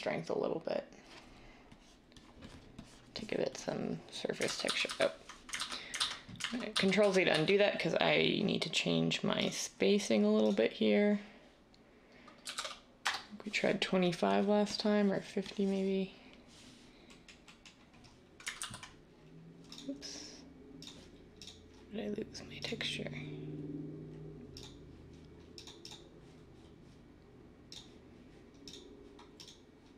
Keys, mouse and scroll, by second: 4.4 ctrl+z, 4.6 ctrl+z, 4.8 ctrl+z, 12.4 typing, 12.9 Return, 17.2 typing, 18.5 ctrl+z.